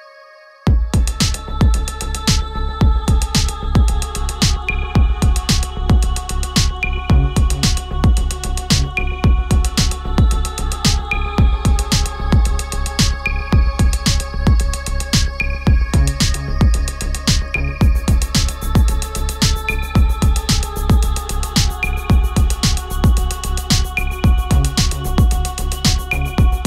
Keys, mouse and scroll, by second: 5.9 click, 9.2-12.1 drag, 12.1-13.2 ctrl+scroll down 1, 13.2-13.9 scroll down 1, 17.3 click.